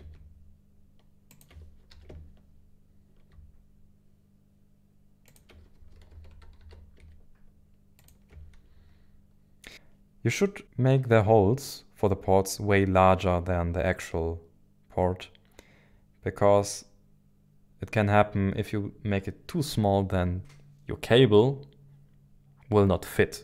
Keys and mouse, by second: 1.4 ctrl+shift+click, 1.9 s, 5.3 ctrl+shift+click, 5.7 g, 6.1 x, 6.3 y, 6.6 x, 8.0 ctrl+shift+click, 9.7 KP_1, 9.7 KP_9.